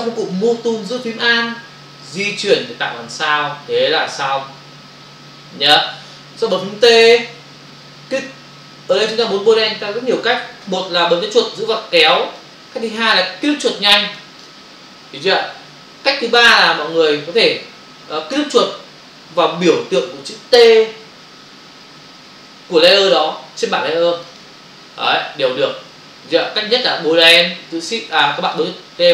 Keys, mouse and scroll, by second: 2.1 alt+click, 11.6 click, 12.9 click, 14.1 click, 14.4 double click, 16.8 Return, 24.1 click, 26.4 click, 27.3 click, 28.4 click.